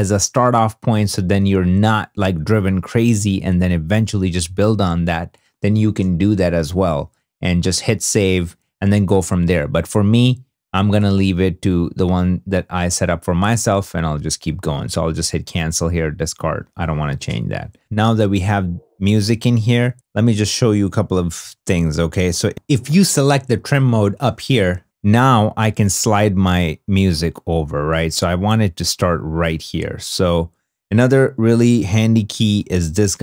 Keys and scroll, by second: 17.7 space, 18.9 space, 19.9 2.